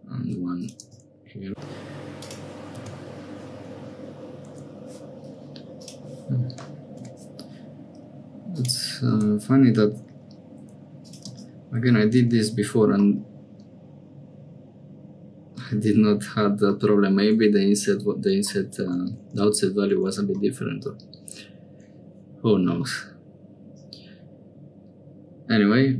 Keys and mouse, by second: 1.5 k, 5.8-12.2 drag, 12.2 Tab, 13.1-15.6 drag, 16.7 click, 19.2 Tab, 19.9 Tab, 20.4-21.9 drag, 22.8-25.9 middle drag.